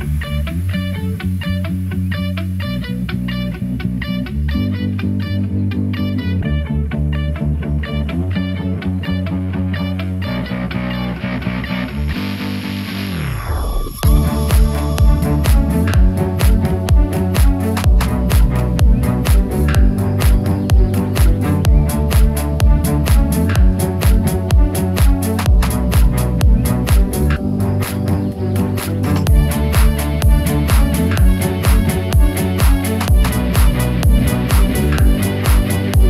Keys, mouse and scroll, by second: 0.1 Return, 0.1 0, 1.3 alt+click, 2.2 s, 3.5 z, 5.3 Return, 6.7 alt+shift+click, 7.5 alt+shift+click, 8.2 alt+shift+click, 10.2 ctrl+b, 20.6 click, 21.3-21.6 scroll up 1, 22.2 ctrl+z, 22.8 shift+middle click, 23.4 shift+scroll up 1, 24.1 ctrl+b, 26.2 click, 26.7 middle click, 28.5 ctrl+r, 29.4 right click, 30.4 s, 30.8 x, 32.4 Return, 33.9 ctrl+b.